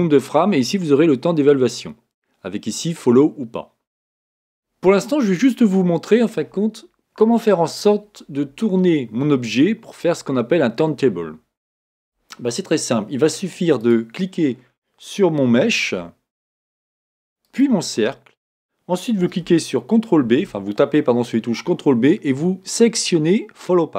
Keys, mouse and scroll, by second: 5.7-8.7 middle drag, 13.8 click, 17.4 shift+click, 20.2 ctrl+p.